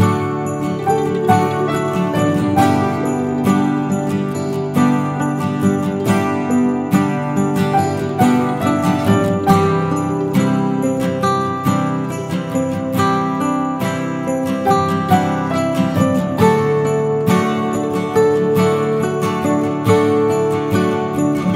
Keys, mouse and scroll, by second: 1.5 Tab, 1.8 middle click, 3.7 shift+middle click, 3.9-5.0 scroll up 2, 4.2 middle click, 5.0-5.4 scroll up 2, 5.4 Tab, 5.8 middle click, 6.5 click, 6.8 alt+click, 7.4-7.8 scroll down 2, 7.5 middle click, 8.1 scroll down 3, 8.3 middle click, 8.8 middle click, 9.2-9.6 scroll up 3, 9.4 middle click, 10.1 scroll up 1, 10.3 middle click, 11.4 right click, 12.9-13.7 scroll down 2, 13.1 middle click, 13.7-14.3 scroll up 1, 14.3 scroll up 2, 14.9 ctrl+z, 15.3 ctrl+z, 15.6 ctrl+z, 15.8 ctrl+z, 16.6 click, 16.9 alt+click, 17.3-17.8 scroll down 2, 17.5 middle click, 17.8-18.4 scroll up 3, 18.4 right click, 19.4-19.9 scroll down 1, 19.9 click, 20.3 right click, 21.3 click.